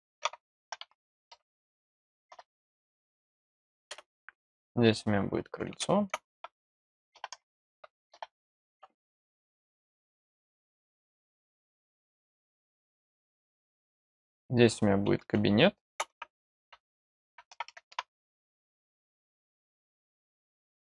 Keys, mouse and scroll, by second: 4.4 click, 9.9 click, 13.4 click, 19.0 click, 19.5 click.